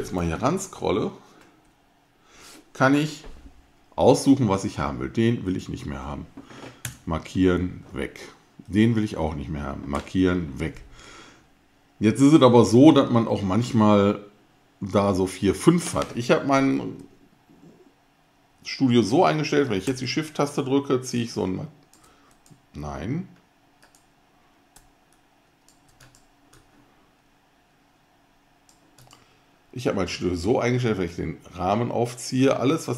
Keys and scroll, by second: 6.8 alt+BackSpace, 12.9 BackSpace.